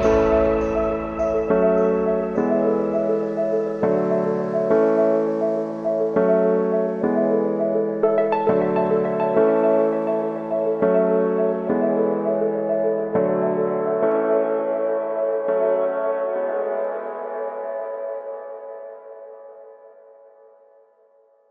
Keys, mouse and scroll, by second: 0.3 Return, 1.6 click, 2.1 space, 7.5 space, 8.3 click, 9.0 s, 9.9 click, 10.1 r, 10.7 click, 11.4 u, 14.1 click, 14.8 -, 15.3 Return, 16.0 space, 18.4 space, 19.0 click, 20.0 Return, 21.4-21.5 drag.